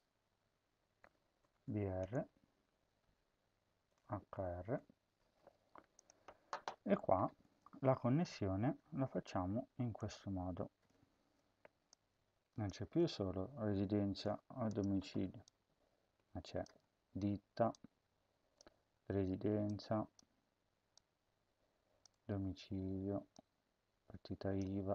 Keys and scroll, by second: 0.8-1.8 typing, 2.9-4.6 typing, 11.0 ctrl+c, 12.7 ctrl+v, 16.6 BackSpace, 18.5 BackSpace, 24.6 BackSpace.